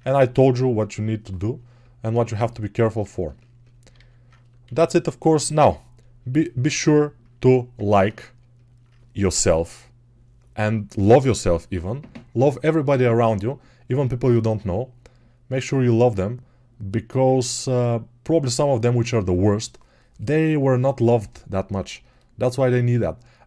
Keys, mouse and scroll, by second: 3.8 alt+q, 4.5 g.